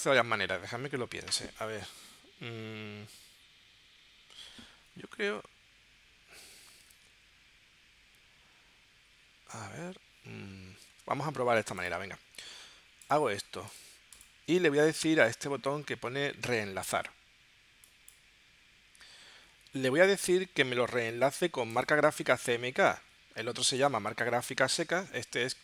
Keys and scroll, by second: 7.0 super+Tab, 10.9 super+Tab.